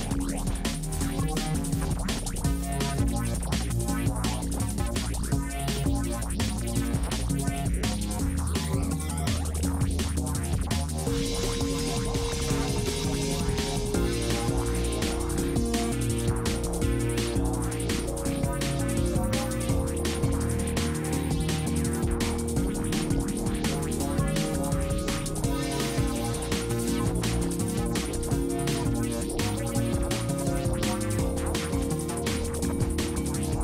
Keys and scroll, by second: 6.2 ctrl+d, 7.5 ctrl+space, 8.1 space, 23.1 space, 30.3 space, 31.7 space.